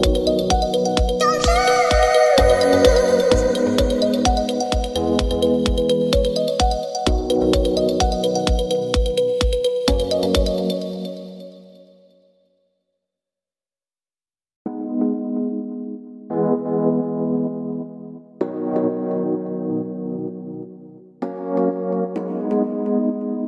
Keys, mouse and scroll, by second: 5.8 click, 10.8-19.4 drag.